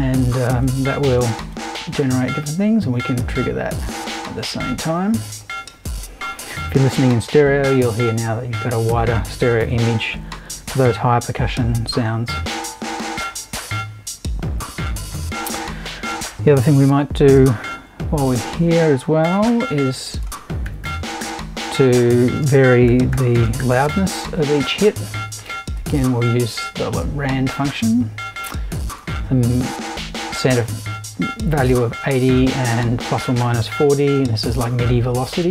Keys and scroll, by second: 19.2 super+i, 20.4-24.4 typing.